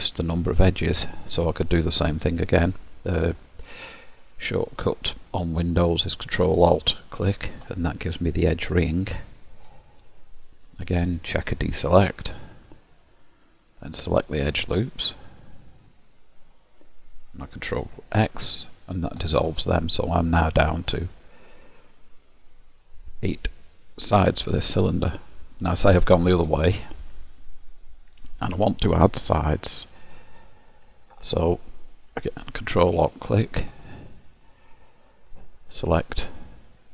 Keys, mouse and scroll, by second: 7.0 ctrl+alt+click, 8.4 middle click, 10.8 click, 13.6 click, 18.6 ctrl+x, 19.6 middle click, 32.8 ctrl+alt+click, 34.8 click.